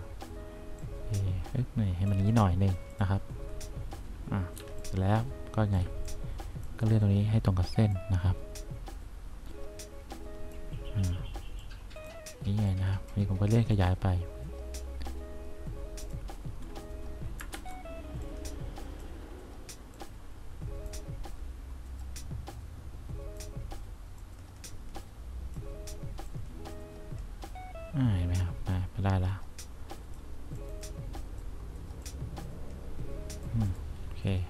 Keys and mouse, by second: 0.9-2.2 drag, 4.7 1, 11.7 click, 13.0 click, 13.8-15.1 drag, 17.7 ctrl+z.